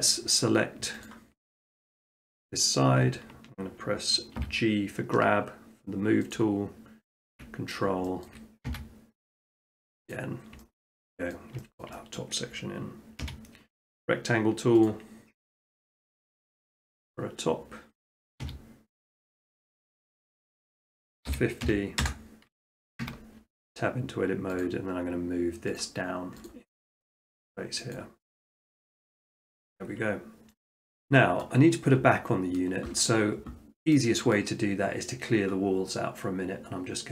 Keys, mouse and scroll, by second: 0.0-1.6 drag, 1.8 shift+middle click, 2.1 middle click, 2.4 middle click, 2.5 middle click, 2.6 shift+middle click, 4.4 g, 6.3 click, 7.6 middle click, 7.8 middle click, 8.3 shift+middle click, 8.4 shift+middle click, 8.7 x, 10.1 click, 10.8 shift+middle click, 11.3 middle click, 11.8 shift+middle click, 12.2 middle click, 12.6 middle click, 13.3 r, 14.9-16.0 drag, 16.7-17.8 drag, 18.2 middle click, 18.4-19.3 scroll, 18.4 e, 19.4 click, 20.0 click, 21.3-21.6 typing, 22.0 Return, 23.0 Tab, 24.6-25.7 drag, 25.8 click, 27.9 click, 28.4 middle click, 28.5 middle click, 29.7 shift+middle click, 29.7 shift+middle click, 29.9 middle click, 31.4 scroll, 32.5 middle click, 34.4 middle click.